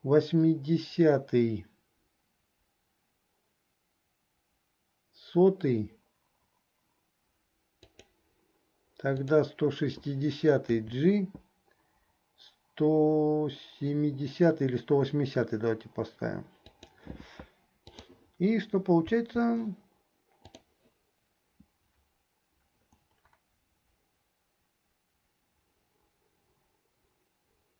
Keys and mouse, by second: 9.2 click, 18.1 click, 18.1 right click, 19.3 space, 20.7 click, 20.7 right click.